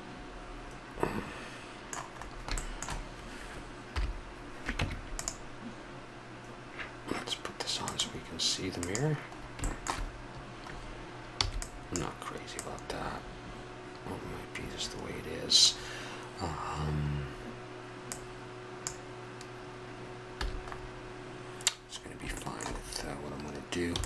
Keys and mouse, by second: 2.2-3.9 middle drag, 3.9 KP_7, 4.8 Tab, 7.8-10.1 drag, 9.4-11.4 middle drag, 11.4-14.4 drag, 11.4 b, 18.1-19.9 drag, 20.4 a, 20.7-22.4 middle drag, 23.9 b.